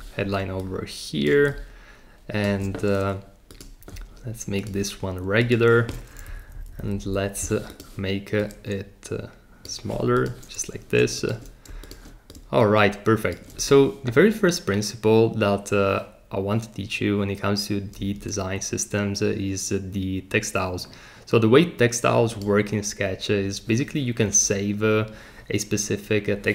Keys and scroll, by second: 6.1 Down, 6.3 Down, 6.4 Down.